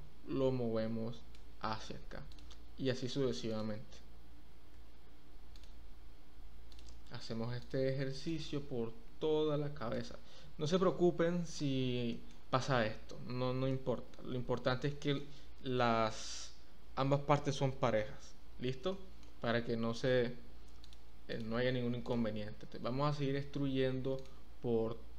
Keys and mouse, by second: 2.3 click, 4.3 e, 4.7 z, 8.2-9.9 drag, 12.1 shift+middle click, 14.9 shift+middle click, 18.9 shift+middle click, 21.3 click, 23.1 e, 23.5 z.